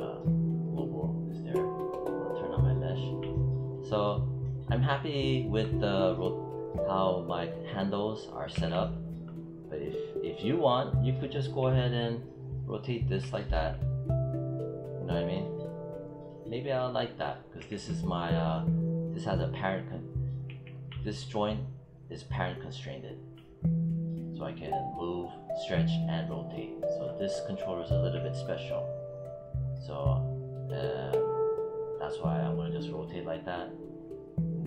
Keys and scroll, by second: 8.4 e, 11.4 j, 20.3 z.